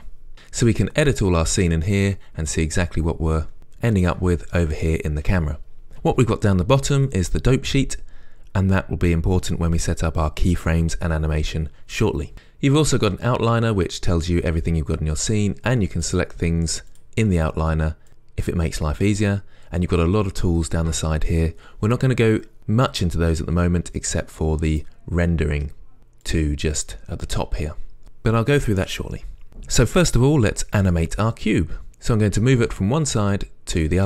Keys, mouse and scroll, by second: 0.7-16.2 middle drag, 16.2 click.